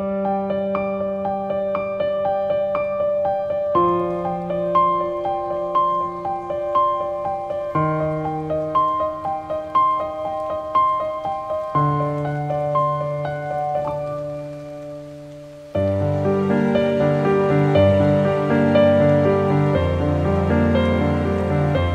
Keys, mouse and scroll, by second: 4.0-6.5 drag, 6.5-9.3 drag, 9.8 click, 11.7 scroll down 1, 12.4 scroll up 1, 13.5 scroll down 1, 14.9 click.